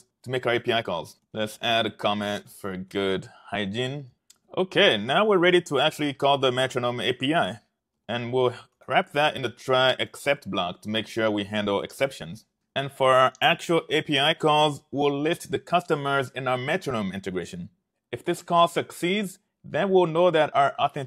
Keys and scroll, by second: 0.0-4.6 typing, 7.8-12.3 typing, 9.7 Return, 14.0 Tab.